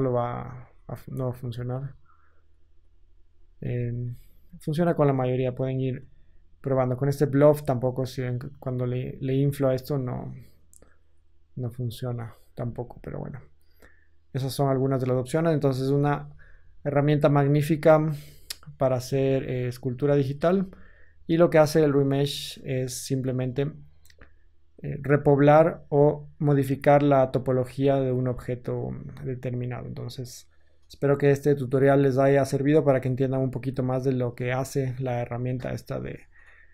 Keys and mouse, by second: 0.5 ctrl+z, 4.0 ctrl+z, 8.8 ctrl+z, 11.9-12.4 drag, 12.5 ctrl+z, 15.7 KP_1, 18.1 ctrl+z, 19.2 ctrl+Tab, 21.1 a, 21.4 a, 25.3-36.7 shift+drag.